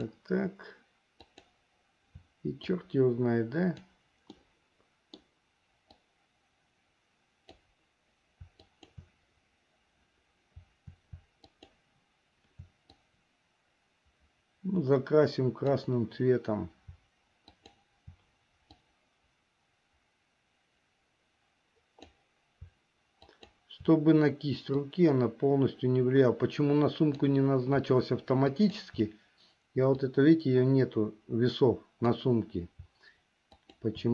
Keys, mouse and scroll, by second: 1.4 shift+click, 2.8-4.1 drag, 4.5 middle click, 6.2-7.7 drag, 8.7 shift+click, 11.4 shift+click, 13.1-16.0 drag, 17.5 shift+click, 18.9-22.4 drag, 23.4 shift+click, 24.9-27.5 drag, 28.6 shift+click, 30.2-32.4 drag, 33.6 shift+click.